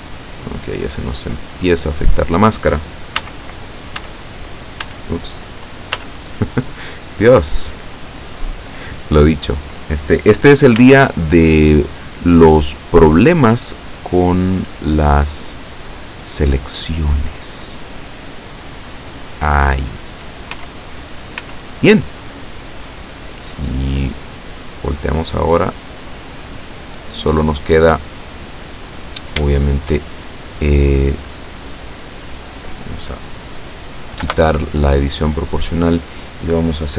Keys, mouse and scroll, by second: 1.4 scroll up 2, 3.3 a, 4.1 a, 4.9 a, 6.0 z, 10.8 z, 12.6 right click, 13.5 click, 14.4-14.8 scroll up 1, 15.1-16.0 scroll down 5, 16.4 scroll down 2, 17.8-18.3 scroll down 2, 18.8-19.5 scroll up 4, 20.6 z, 21.5 z, 22.3-23.1 scroll down 2, 23.5-24.9 drag, 25.1-26.1 drag, 26.1 click, 27.0 click, 28.1 middle click, 28.9-29.5 scroll up 2, 29.6 shift+middle click, 30.1-30.6 shift+scroll up 3, 31.5 right click, 34.3 o.